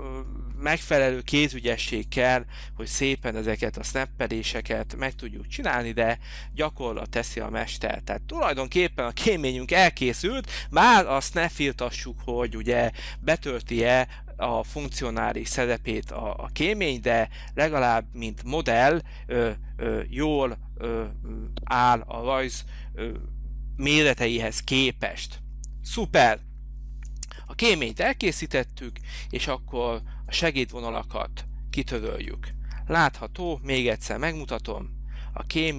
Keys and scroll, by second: 5.1 Delete.